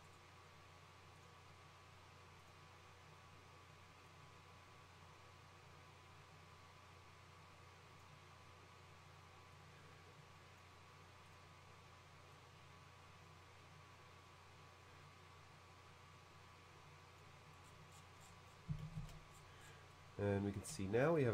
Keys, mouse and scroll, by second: 0.1 right click, 1.2 click, 2.4 click, 4.1-8.0 drag, 9.6-10.6 drag, 11.3 click, 12.4-17.2 drag, 17.6 middle click, 17.7-18.6 scroll down 1, 18.8 shift+space, 19.1 shift+c, 19.3-19.9 scroll down 1, 20.0 middle click, 20.8 shift+middle click.